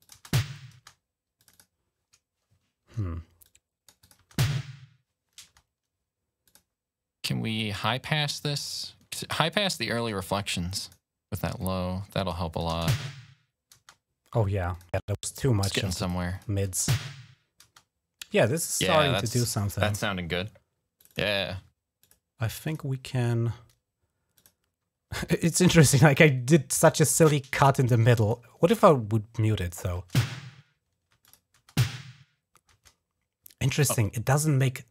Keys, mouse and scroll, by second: 0.5 typing, 1.2 click, 3.2 click, 3.8 click, 4.1 space, 5.2 space, 6.2 click, 10.6 click, 11.3 click, 12.3 click, 12.6-13.5 typing, 14.5 click, 15.5 click, 16.0-17.4 typing, 16.1 click, 20.8 click, 20.9 click, 21.8 click, 22.4 click, 24.1 click, 28.0 click, 29.8 space, 30.9 space, 31.0 click, 31.4 space, 32.5 space, 34.8 click.